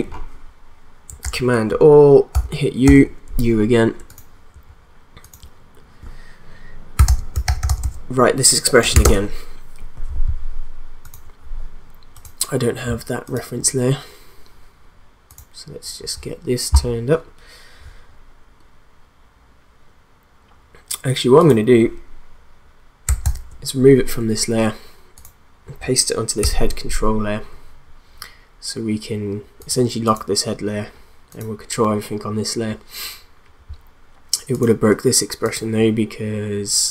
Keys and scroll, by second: 1.2 ctrl+a, 2.3 u, 6.7-9.0 typing, 23.2 ctrl+x, 26.4 ctrl+v.